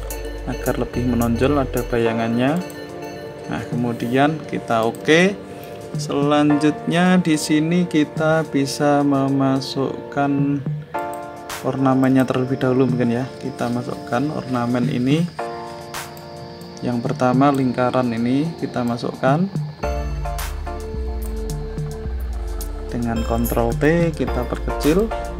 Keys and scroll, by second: 23.2 ctrl+t.